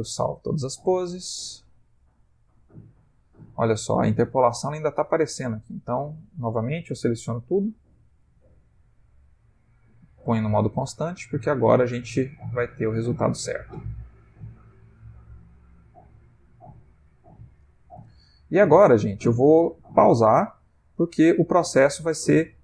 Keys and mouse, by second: 0.6 click, 8.2 a, 8.9 t, 10.9 click, 18.1 Left, 18.7 Left, 19.2 Left, 19.8 Right, 20.6 Left, 22.2 Left.